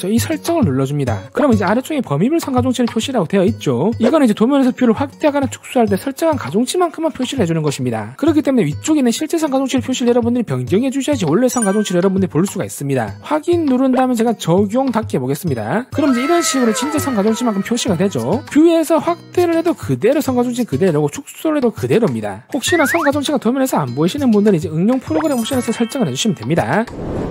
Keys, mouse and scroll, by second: 1.2 click, 11.4 click, 13.9 click, 14.8 click, 15.7 click, 19.2-20.4 drag, 21.6 click.